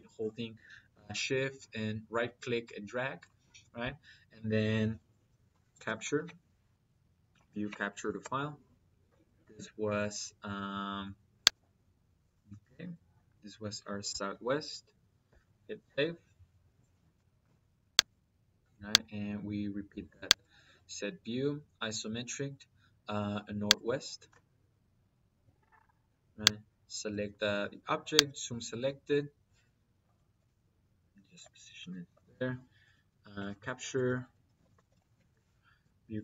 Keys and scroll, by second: 5.3-6.1 typing, 7.2 Down, 8.1 Return, 13.9 s, 14.2 w, 15.1 Return, 31.5 Escape, 32.4-35.0 typing, 33.8 Escape, 35.7 Down.